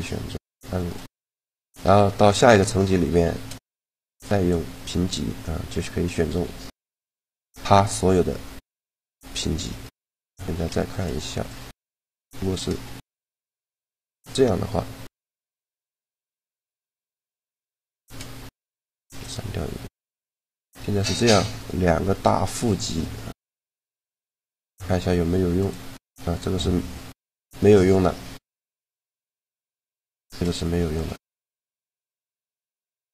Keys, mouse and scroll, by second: 2.9 shift+g, 5.5 g, 8.5-10.5 right drag, 10.1 a, 10.5 click, 10.5 b, 11.0 b, 13.6 shift+d, 16.3 click, 18.6 click, 18.8 x, 19.3 right click, 20.1 g, 21.5 g, 23.4 g, 24.4 shift+g, 29.5-30.5 right drag, 29.8 shift+g, 32.6-33.1 right drag.